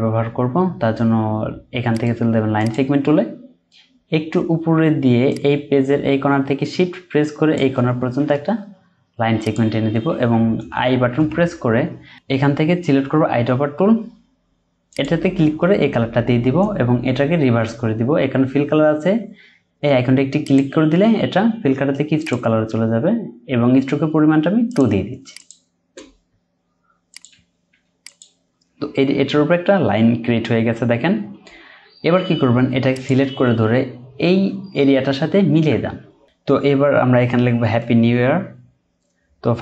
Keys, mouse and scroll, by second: 1.9 right click, 11.2 i, 27.3 typing.